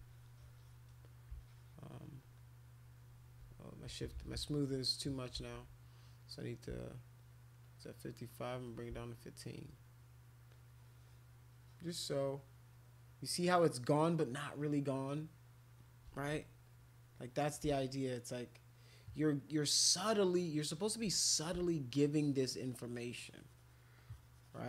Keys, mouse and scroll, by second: 0.0 click, 0.4 click, 0.6 click, 1.4 shift+click, 1.9 shift+click, 2.3 shift+click, 2.9 shift+click, 3.8 ctrl+z, 4.1 ctrl+z, 4.4 ctrl+z, 5.3 ctrl+z, 7.6 shift+click, 10.5-11.9 shift+drag, 12.2-13.7 shift+drag, 15.1 shift+click, 16.2 alt+click, 16.6 click, 17.7-18.8 shift+drag, 19.5 shift+click, 19.9 shift+click, 21.1 click, 21.7 shift+click, 22.4 shift+click, 22.6 shift+click, 23.1 shift+click, 23.3 shift+click, 23.9 shift+click, 24.2 shift+click, 24.4 shift+click.